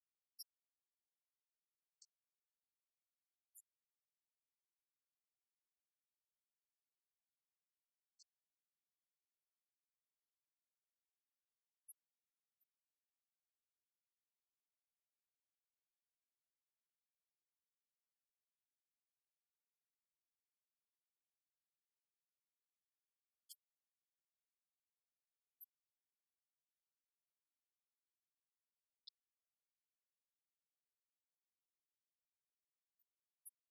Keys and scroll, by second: 4.1 Right, 15.1 Page_Up, 18.4 Page_Up, 20.3 Page_Up, 25.5 Page_Up, 29.7 Page_Down, 30.7 Page_Up, 31.5 Page_Down, 31.8 Page_Up.